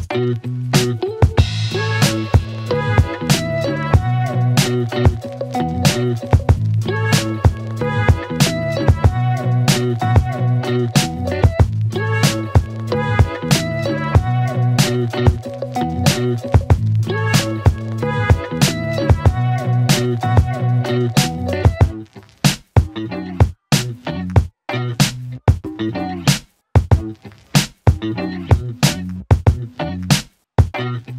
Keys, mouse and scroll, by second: 8.6 click, 12.0 right click, 14.9 click, 17.1 click, 18.9 click, 23.7 right click, 24.8 click, 29.4 ctrl+Num_Lock, 29.5 ctrl+c, 30.6 click.